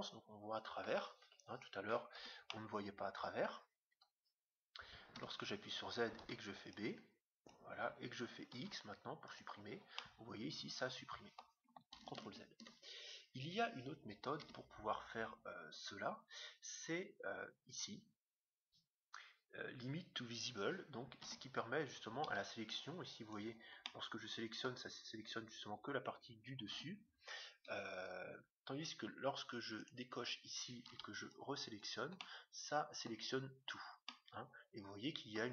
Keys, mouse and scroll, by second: 1.2 KP_7, 2.1 z, 2.5-4.4 middle drag, 3.9 KP_7, 5.1 z, 6.2 b, 8.5 x, 10.0-11.7 middle drag, 12.2 ctrl+z, 13.3 KP_7, 14.4 z, 21.2 a, 22.2 b, 23.8-25.5 middle drag, 26.6 a, 27.6 KP_7, 29.7-31.7 drag, 30.9 b, 32.2-33.8 middle drag, 34.0-35.5 middle drag.